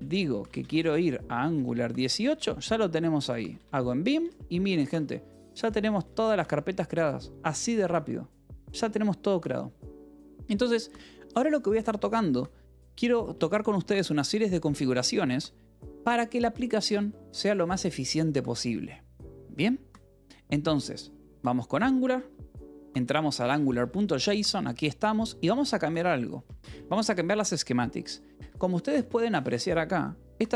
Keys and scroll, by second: 0.0-6.4 typing, 7.6 Return, 8.4 shift+;, 12.2 k, 13.2 Return, 14.1 j, 14.7 k, 16.1 alt+Tab, 16.5 j, 17.0 k, 21.0 Return, 21.6 j, 23.1 k, 23.6 j, 24.0 Escape, 24.2 k, 25.7 o, 26.6 space, 28.3 Escape, 28.4 k, 29.1 h, 30.1 shift+v.